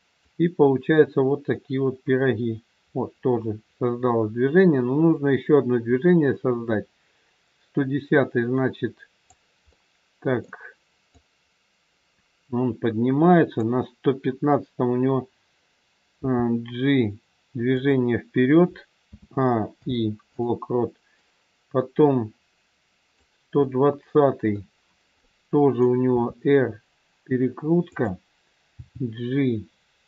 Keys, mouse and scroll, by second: 0.2 click, 9.7 middle click, 11.1 click, 16.1 g, 19.0 a, 19.7 i, 21.1 click, 23.7 middle click, 26.0 middle click, 26.1 r, 28.7 g.